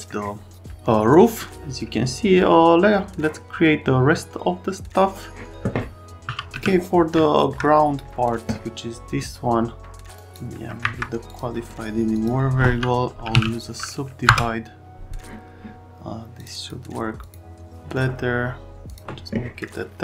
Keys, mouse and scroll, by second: 6.3 r, 6.5 z, 10.1 right click, 10.8 Escape, 11.2 click, 12.1 click, 13.0-13.8 typing, 14.2 Return, 16.3 click, 16.5 click, 17.2 click, 18.8 click, 19.6 middle click.